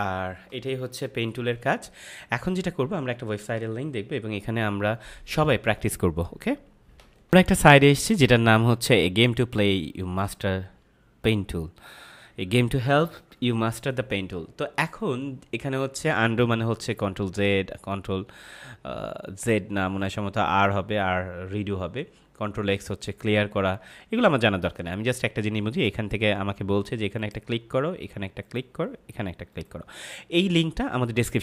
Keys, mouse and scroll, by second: 1.3 ctrl+-, 6.9 ctrl+Num_Lock, 7.2 ctrl+m, 27.1 click.